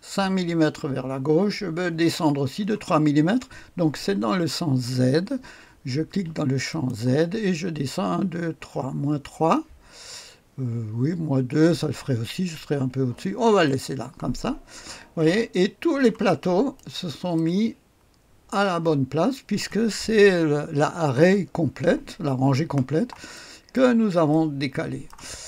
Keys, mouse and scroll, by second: 6.7 click, 7.6-8.9 scroll down 1, 8.9-9.7 scroll down 1, 11.5-12.4 scroll up 1, 12.4-13.3 scroll down 1, 13.6 click, 14.5-15.3 scroll down 1, 15.3-16.3 drag, 16.3 right click, 17.3 right click, 17.6 click, 18.3 click, 19.6 click, 23.3 right click, 24.4 middle click, 24.9 click.